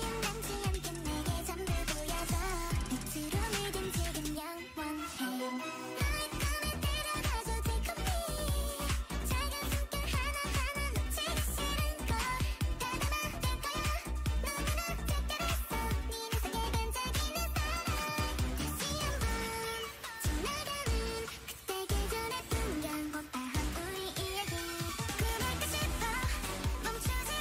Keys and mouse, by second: 0.0-1.6 drag, 1.4 middle click, 1.4 right click, 3.3-7.6 drag, 5.9 a, 6.1 a, 7.4 Tab, 7.7 a, 9.4 l, 10.8 r, 12.3 r, 14.1 g, 15.1 Tab, 22.7 Tab, 25.5-27.3 drag, 26.4 h.